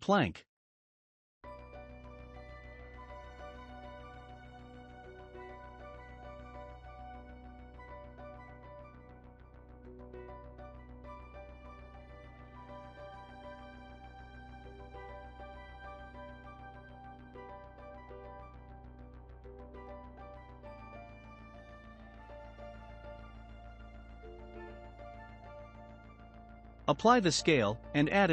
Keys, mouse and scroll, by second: 0.2-1.6 middle drag, 1.6 s, 9.5-11.3 shift+middle drag, 11.3-11.8 scroll up 2, 12.2-15.2 drag, 15.6-17.4 shift+middle drag, 17.4-20.3 drag, 20.3-21.5 shift+middle drag, 21.5-22.0 scroll up 3, 22.0-24.0 shift+middle drag, 24.0-24.5 scroll down 2, 24.5-25.0 middle drag, 25.0-25.7 scroll down 1, 25.7 shift+middle click, 26.5 ctrl+a.